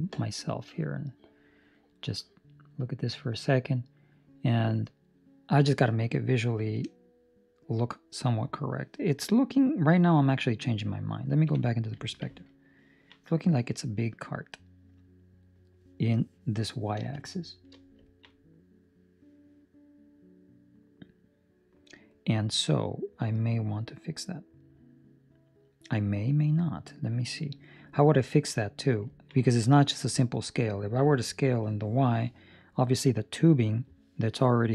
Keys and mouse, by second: 6.0 middle click, 8.5 middle click, 11.4 KP_5, 12.7 ctrl+middle click, 13.1 middle click, 17.2 shift+middle click, 18.0 ctrl+middle click, 18.3 middle click, 28.2 ctrl+middle click, 28.5 middle click, 29.1 ctrl+middle click, 29.3 middle click, 29.9 middle click, 30.6 middle click, 30.8 ctrl+middle click.